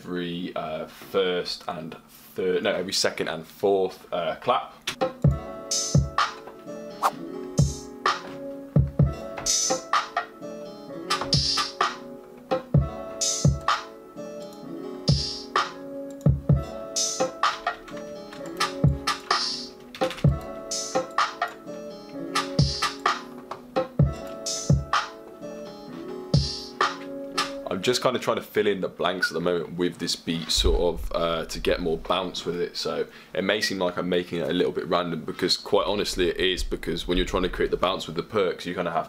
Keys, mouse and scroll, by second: 23.4 click, 25.4 click.